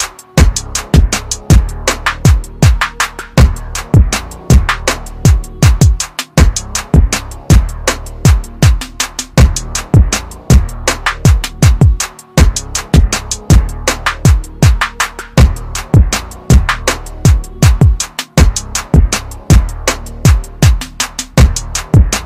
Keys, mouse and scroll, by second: 15.6 KP_Subtract, 18.6 click.